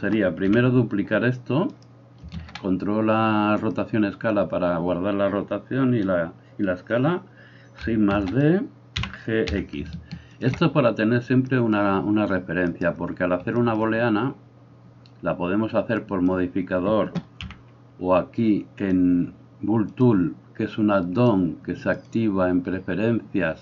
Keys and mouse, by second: 0.5 KP_1, 1.7 right click, 2.2-12.7 ctrl+middle drag, 2.3 ctrl+a, 8.2 shift+d, 9.0 g, 12.7 right click, 12.9-16.0 middle drag, 16.0-19.0 drag, 17.4 n, 19.0-20.0 middle drag, 20.0-23.6 drag.